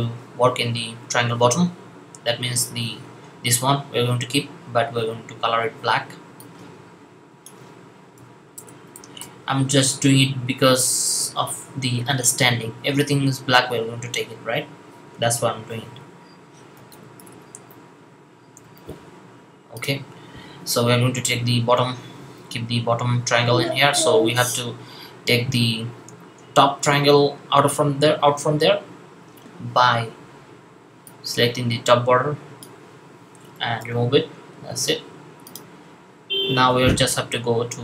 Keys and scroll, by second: 8.0-9.0 typing, 16.5-17.2 typing, 18.5 typing.